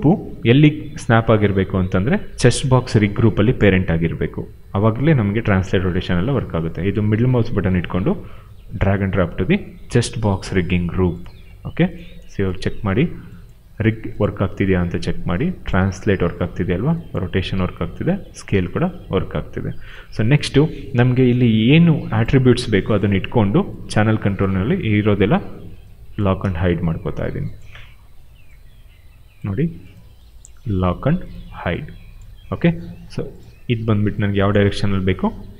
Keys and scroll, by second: 15.7 ctrl+z, 16.2 e, 17.0 ctrl+z, 17.4 r, 18.4 ctrl+z, 22.8 e, 24.5 ctrl+z, 34.8 ctrl+z.